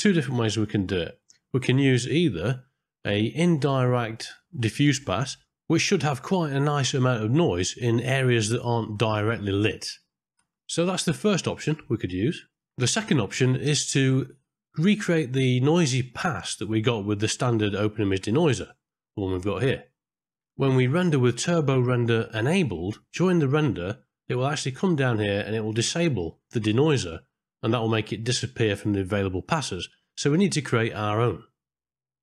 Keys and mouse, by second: 0.0 middle click, 2.3 middle click, 3.7 click, 16.8 click, 17.4 click, 23.6 click, 24.4-25.9 middle drag, 27.4 click.